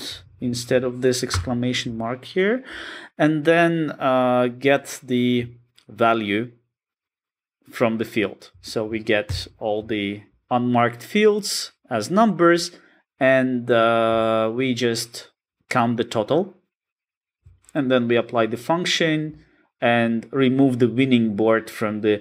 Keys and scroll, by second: 3.8 Return, 9.4 alt+super+[.